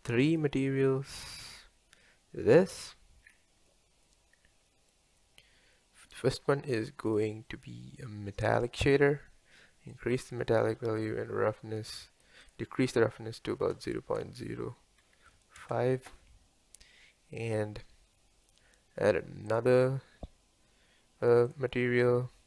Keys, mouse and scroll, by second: 7.2-15.9 drag, 15.9 KP_Enter, 21.6 click.